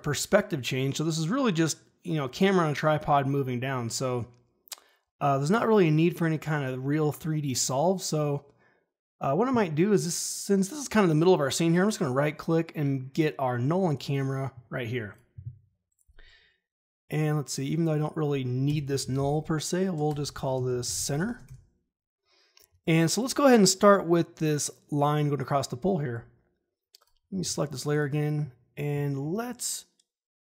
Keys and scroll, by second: 18.6 Return, 18.7-21.7 typing, 27.4 e.